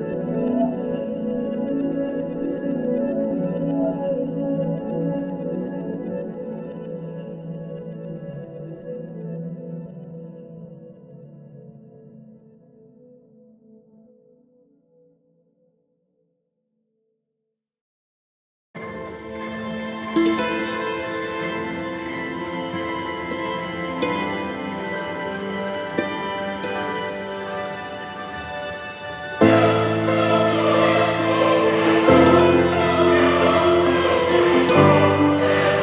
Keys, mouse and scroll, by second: 5.0 scroll down 9, 5.3-6.3 middle drag, 6.6-8.0 drag, 8.0 space, 10.8 space, 14.9 click, 16.0 click, 16.1-16.5 scroll down 2, 16.5-18.7 middle drag, 17.4-20.5 drag, 21.2 KP_7, 21.4-22.0 scroll down 8, 21.6-24.3 shift+middle drag, 23.0 shift+a, 23.7 click, 24.3 shift+a, 24.8 z, 25.6 Tab, 26.1 s, 27.5 Tab, 27.6 g, 28.5 Tab, 28.8 ctrl+r, 30.7-32.1 drag, 32.1 ctrl+r, 32.6 click, 33.2 Tab.